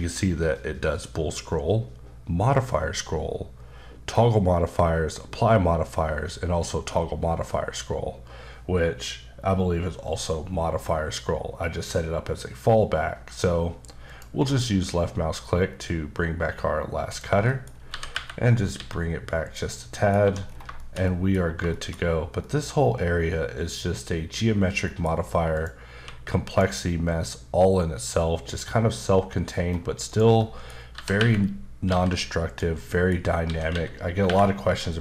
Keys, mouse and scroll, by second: 14.1 click, 15.0-15.7 scroll up 2, 15.7-17.1 scroll down 3, 17.1 click, 17.5 middle click, 17.7 scroll up 2, 17.9-18.7 typing, 19.4 click, 20.4 scroll down 3, 20.7 shift+middle click, 21.7 shift+middle click, 22.1-22.4 scroll down 1, 22.4 middle click, 24.9 middle click, 25.1-25.6 scroll up 2, 25.6 click, 25.9 q, 26.5 click, 27.1-27.9 scroll down 1, 28.4-29.0 scroll up 2, 29.0-30.1 scroll up 2, 30.4 middle click, 30.7 scroll up 1, 30.9-31.9 typing, 32.5 click, 32.8 middle click, 33.4-34.2 typing.